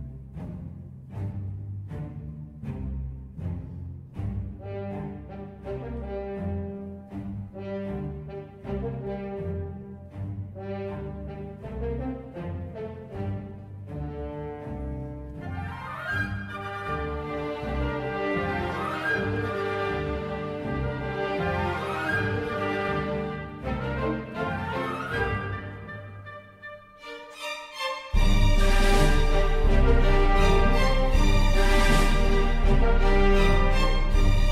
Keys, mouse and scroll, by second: 0.7 click, 10.4 click, 12.7 ctrl+f, 17.4 click, 28.6 click.